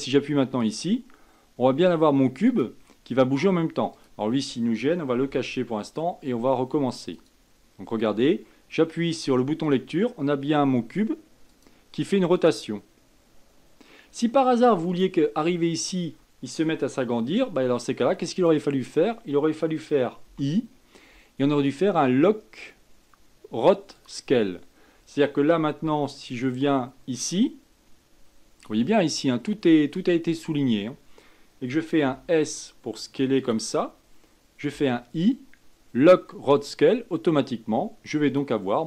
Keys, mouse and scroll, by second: 0.9-4.3 drag, 5.6 h, 7.4-14.8 drag, 15.2 click, 18.6-20.6 drag, 20.6 i, 26.7-29.7 drag, 32.4 s, 35.0 i, 38.5-38.8 drag.